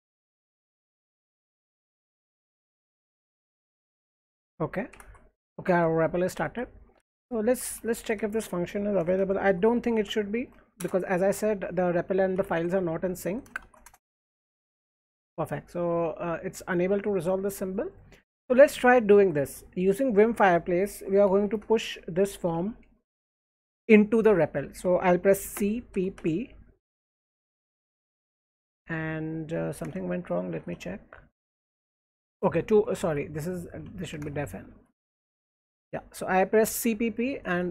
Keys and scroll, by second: 0.0-14.5 typing, 4.9 alt+Left, 5.7 alt+Right, 7.0 alt+Left, 13.8 shift+Return, 19.0 alt+Right, 20.8-23.1 typing, 24.2 Escape, 24.2 typing, 25.5-25.9 typing, 27.9 Return, 29.1 Return, 29.5-31.0 typing, 32.3 Return, 32.5-36.0 typing.